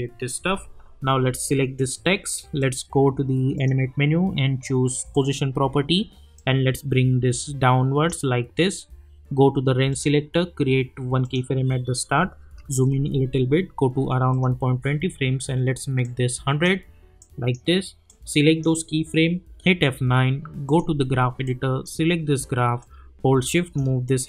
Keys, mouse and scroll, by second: 1.3-8.2 drag, 9.1 scroll down 1, 9.9 click, 12.6 =, 13.3 =, 14.3-16.6 drag, 19.5 F9, 20.6-24.2 drag.